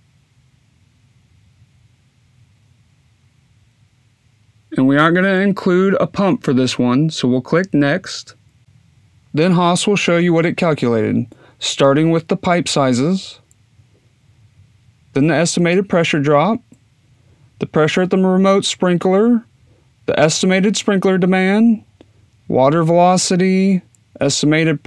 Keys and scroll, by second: 0.1-1.5 typing.